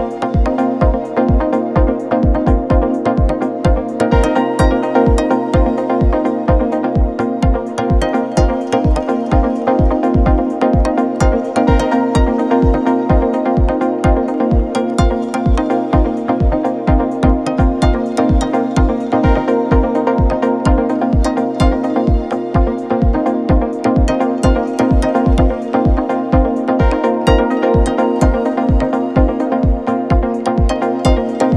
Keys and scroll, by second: 4.5 4, 6.5 2, 7.5 4, 9.4 3, 10.3 ], 13.2 ], 14.1 4, 15.8 2, 22.4 ctrl+z, 24.7 ctrl+z, 24.8 ., 26.8 ctrl+z, 29.8 4.